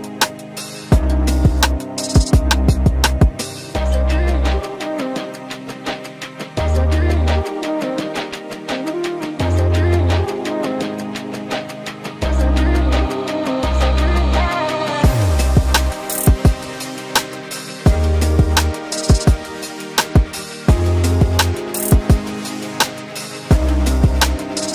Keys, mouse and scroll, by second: 8.2 ctrl+click, 12.7 ctrl+click, 23.1 ctrl+g.